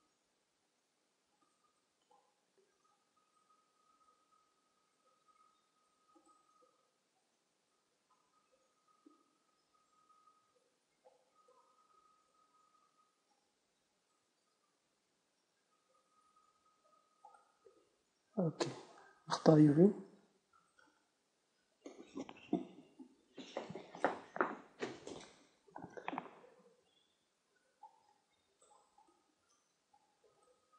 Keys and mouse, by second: 0.4 s, 1.8 right click, 2.1 right click, 2.3 right click, 2.5 right click, 2.9-4.4 right drag, 2.9 s, 7.0 Tab, 12.3 middle click, 12.5-13.9 middle drag, 14.3 Tab, 15.6 s, 18.2 Tab, 18.2 click, 27.5-30.7 drag.